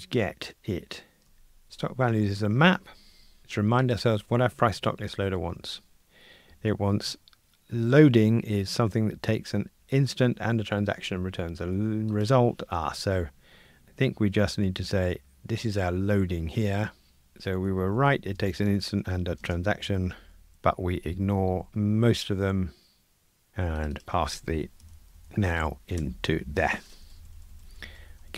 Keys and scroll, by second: 26.0 Escape.